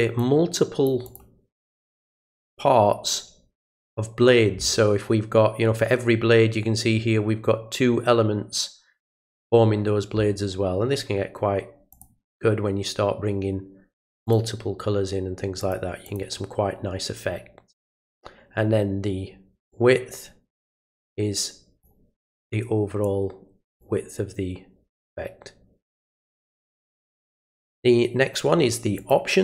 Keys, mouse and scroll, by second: 0.2 click, 1.0 click, 11.9 click, 14.2 click, 15.6 click, 16.0 click, 19.7-21.8 drag, 23.0-23.8 drag, 28.9 click.